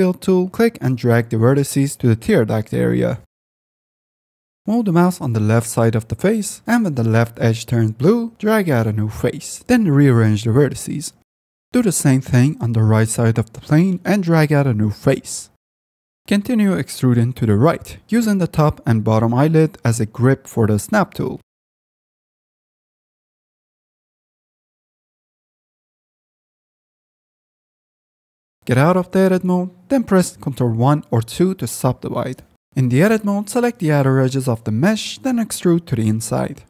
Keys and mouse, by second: 0.9 click, 2.6 click, 3.4 click, 7.9 click, 10.6 click, 12.5-15.7 drag, 18.8 click, 19.3 shift+middle click, 19.7 shift+middle click, 20.0 click, 21.9 click, 22.8 ctrl+r, 23.0 click, 25.1 click, 28.5 Tab, 30.1 ctrl+1, 31.3 click, 31.7 Tab, 32.4 2, 32.6 Tab, 34.5 e, 34.7 x, 34.9 y, 35.6 click, 35.8 s.